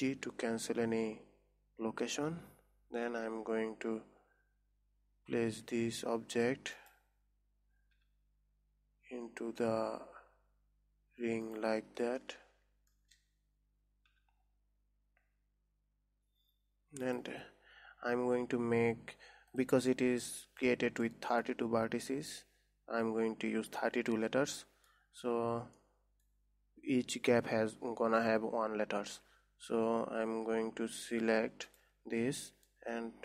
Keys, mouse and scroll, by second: 0.5 alt+g, 3.6 KP_1, 5.2 scroll up 2, 6.2 g, 7.7-8.5 scroll down 3, 8.5 g, 12.3 scroll up 4, 12.8-14.6 shift+middle drag, 14.6 g, 19.4-20.0 scroll down 3, 20.0 click, 20.5 middle click, 21.0 Tab, 21.6-24.6 middle drag, 25.1-29.3 middle drag, 31.7 Tab, 32.1 click, 32.7-33.2 middle drag.